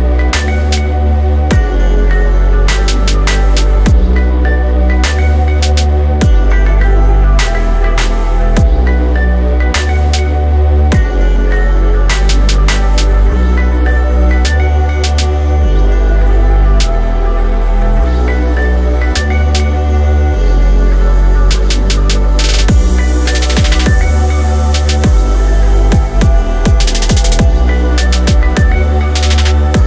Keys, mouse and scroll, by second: 4.8 middle click, 11.9 middle click, 20.9 shift+middle click, 28.0 shift+middle click.